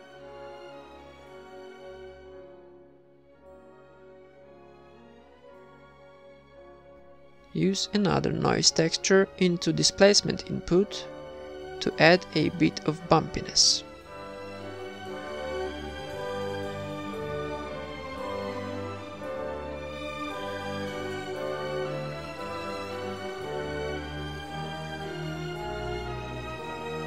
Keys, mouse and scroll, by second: 9.7 ctrl+s, 10.0 shift+b, 11.6-13.9 typing, 13.6 right click, 15.1-25.9 drag, 25.9 ctrl+s.